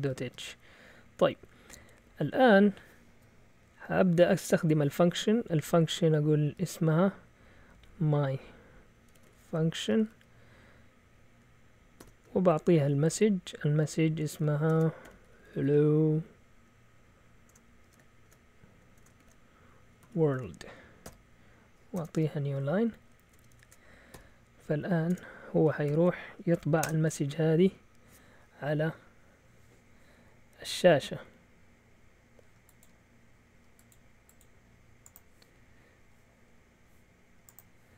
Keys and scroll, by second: 0.0-2.0 typing, 6.3-7.2 typing, 8.8-10.6 typing, 12.0 typing, 13.1 typing, 14.4-16.2 typing, 17.3-24.1 typing, 25.1 Escape, 25.9-27.3 typing.